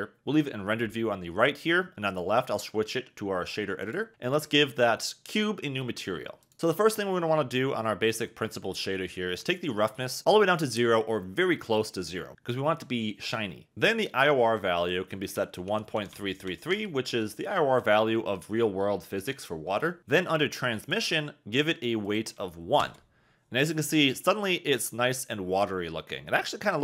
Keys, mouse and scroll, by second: 2.1-3.9 drag, 4.1 n, 9.9-13.7 drag, 14.7-16.7 drag, 16.1 3, 20.8 click, 22.0 click.